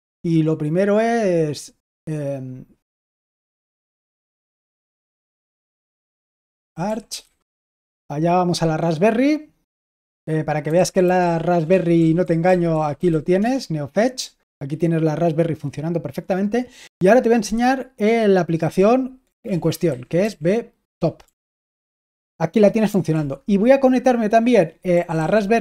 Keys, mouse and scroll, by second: 2.9-7.6 typing, 10.3-13.5 typing, 19.4 ctrl+l, 19.8-21.7 typing, 23.0 super+l, 24.6-25.6 typing.